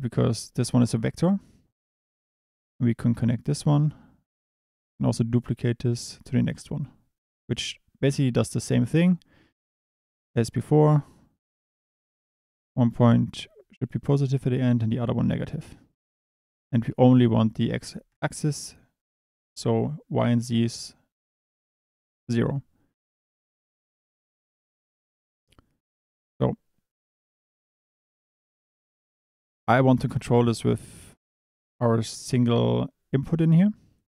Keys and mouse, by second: 2.8-3.7 drag, 4.3 click, 4.8 shift+d, 6.7 click, 10.2-14.0 drag, 14.5 click, 16.0 click, 17.4 click, 25.1 click, 26.2 click, 26.9 click.